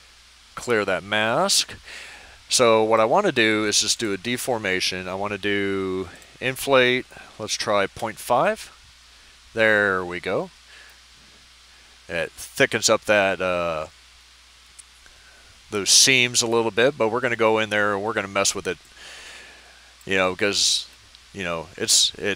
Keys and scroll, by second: 7.3 typing, 7.9 Return.